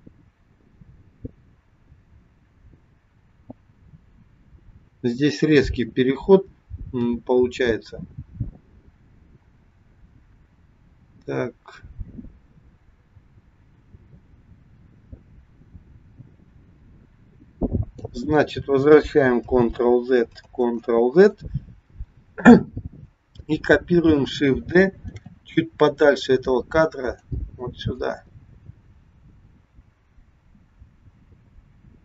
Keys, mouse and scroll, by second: 19.6 ctrl+z, 20.6 ctrl+z, 25.0 shift+d, 28.0 click.